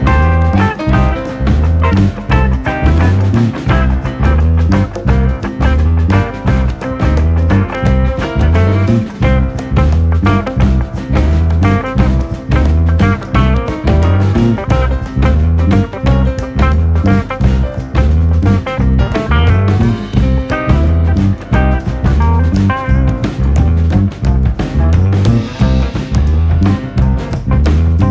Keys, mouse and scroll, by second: 0.1 shift+middle click, 0.4 g, 1.0 shift+middle click, 1.5 shift+d, 3.3 shift+middle click, 3.8 shift+d, 5.8 shift+middle click, 6.3-6.9 drag, 6.9 r, 8.5 click, 9.6 r, 10.8 click, 11.3 shift+d, 13.1 shift+d, 16.1 KP_1, 16.3 KP_9, 16.7-17.1 scroll down 1, 17.1 KP_9, 17.7-18.1 shift+middle drag, 18.1 scroll up 2, 18.3 scroll down 1, 18.5 KP_9, 19.0 scroll up 2, 19.2-19.7 shift+middle drag, 19.7 r, 20.6 click, 21.4 click, 22.3 shift+middle click, 22.7-23.7 drag, 23.9 shift+middle click, 24.4 click, 24.7 click, 25.9 r, 26.8 click, 27.2 Tab, 27.5 click.